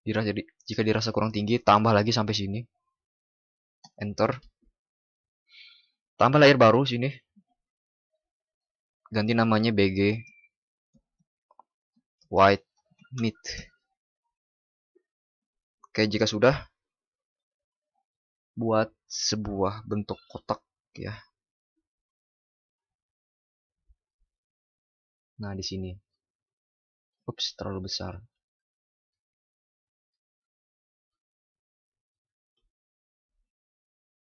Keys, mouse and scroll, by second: 28.2 ctrl+d.